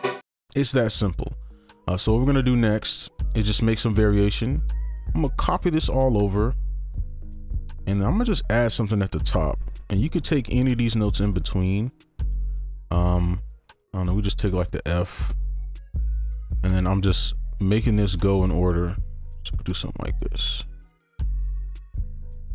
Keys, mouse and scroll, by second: 0.2 space, 1.4 scroll down 1, 1.8 scroll up 1, 2.3 ctrl+a, 2.5-3.4 ctrl+scroll up 2, 4.0 shift+click, 6.1-7.4 scroll up 1, 7.5 double click, 9.7 right click, 11.3 ctrl+click, 12.7 ctrl+right click, 13.7 ctrl+click, 15.0 shift+click, 16.3 ctrl+shift+Up, 20.3 ctrl+click, 21.5 ctrl+click, 21.9 shift+click.